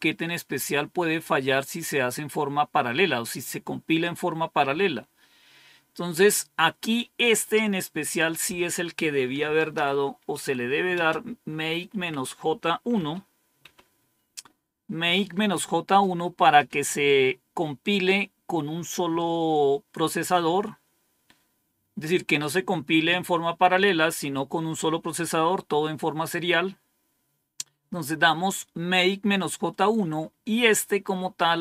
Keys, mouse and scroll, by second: 7.9 click, 9.0-11.7 typing, 12.8-13.5 typing, 30.9-31.6 scroll up 2.